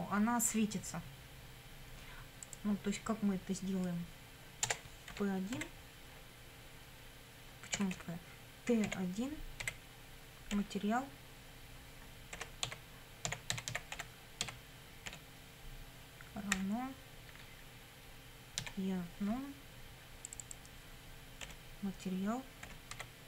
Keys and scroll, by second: 4.7 Return, 5.1 p, 5.6 1, 7.8 BackSpace, 8.9 t, 9.6 1, 10.5 ., 12.4-15.1 typing, 16.6 =, 18.6 e, 21.4 ., 22.6 m, 22.9 a.